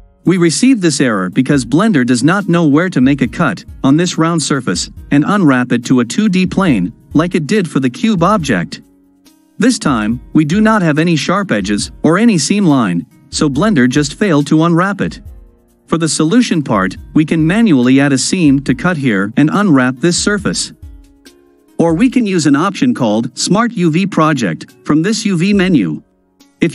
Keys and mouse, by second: 22.2-22.8 drag.